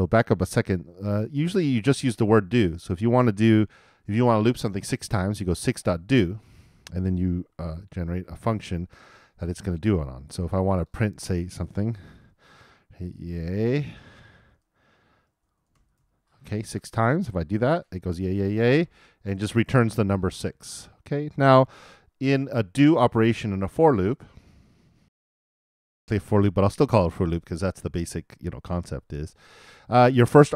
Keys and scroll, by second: 7.1 shift+o, 7.9 shift+[, 8.0 shift+], 8.7 shift+;, 12.0 shift+', 13.1-15.0 typing, 16.5 super+n, 17.2 super+Return, 25.0 alt+|.